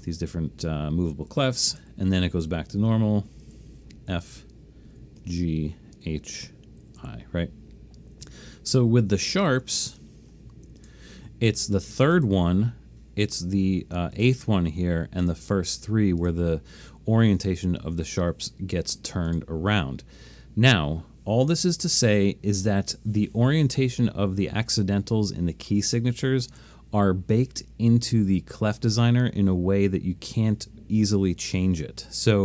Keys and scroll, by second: 0.9-1.8 typing, 3.4 e, 4.2 f, 5.2-7.0 typing, 8.3 typing, 9.3 alt+super+a.